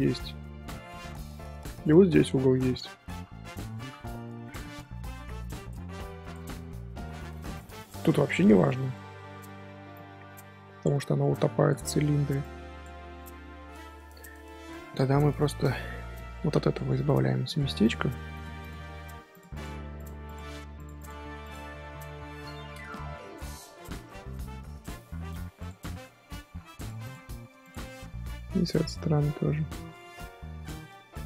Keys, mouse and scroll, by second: 3.6 scroll down 2, 4.3 middle click, 5.1-6.8 scroll up 1, 6.8-7.9 scroll up 1, 7.9 middle click, 8.1 scroll down 1, 8.2-9.9 scroll up 2, 9.9-11.5 scroll up 1, 12.4 click, 13.0 middle click, 13.8-14.3 scroll up 2, 14.3 middle click, 14.5 scroll up 1, 15.0 ctrl+shift+z, 15.2 ctrl+shift+z, 15.5 middle click, 15.7 scroll down 1, 15.8 scroll up 2, 16.3 middle click, 16.7 1, 16.9 click, 17.8 click, 18.6 click, 19.5 click, 20.2 click, 20.9 click, 21.8-24.1 middle drag, 24.1 z, 24.3 middle click, 25.0 z, 25.5 click, 25.7 middle click, 26.4 g, 27.0 click, 27.9-30.7 middle drag, 28.7-29.1 scroll up 1, 29.8-30.7 scroll up 8, 30.7-31.1 scroll down 1, 31.1 click.